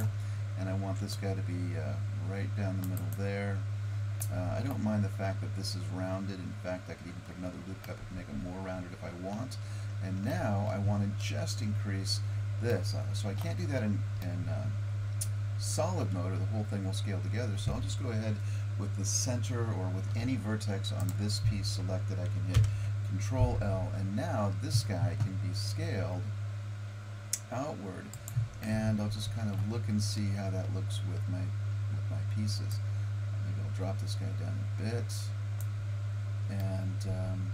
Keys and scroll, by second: 0.7 ctrl+r, 22.6 ctrl+l, 26.0 s.